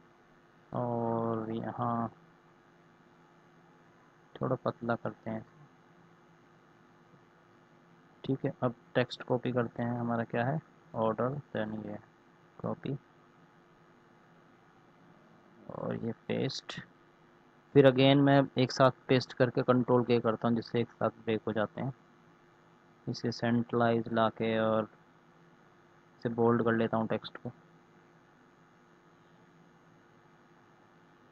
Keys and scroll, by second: 12.0 ctrl+c, 15.5 ctrl+v, 19.3 ctrl+k.